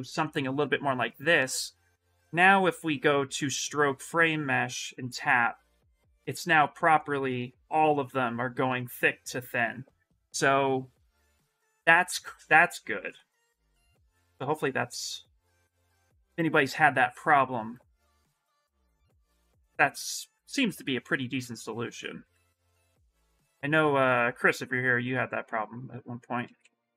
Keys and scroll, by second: 7.7 shift+f, 14.4 ctrl+z, 22.0 w, 26.2 q.